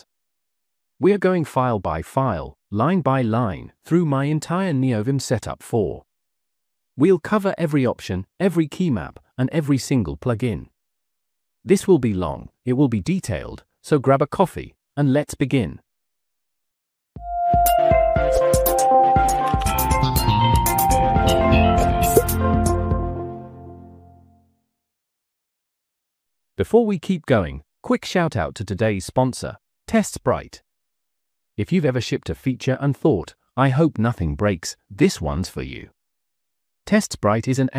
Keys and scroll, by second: 0.0-2.3 typing, 3.0 Escape, 3.3 Escape, 5.4-7.5 typing, 6.1 Return, 6.7 Return, 7.1 Return, 7.9 Return, 8.7 j, 10.4 Return, 10.4 j, 11.6-13.9 typing, 14.6 Down, 14.7 Down, 14.8 Down, 15.6-17.0 typing.